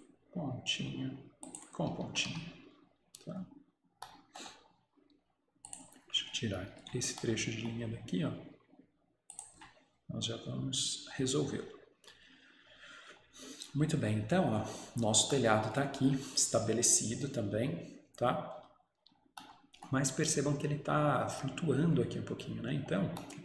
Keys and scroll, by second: 2.1 Escape, 2.4 Escape, 6.9 Delete, 9.6 Delete.